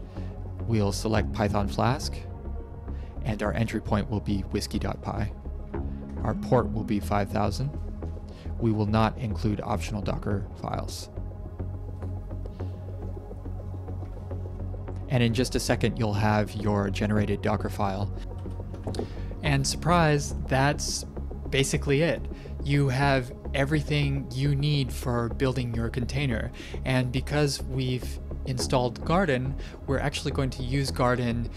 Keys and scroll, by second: 1.4 Return, 5.4-6.4 typing, 7.3 Return, 8.7 Return, 14.4 ctrl+Print.